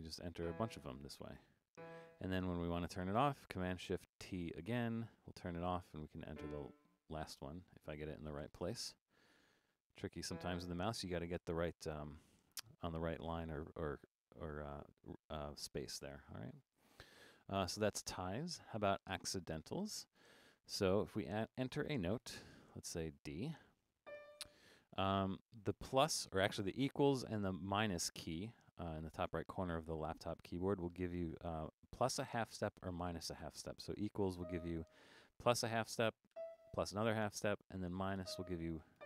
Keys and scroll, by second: 4.3 shift+super+t, 8.5 BackSpace, 21.1 5, 34.4 =.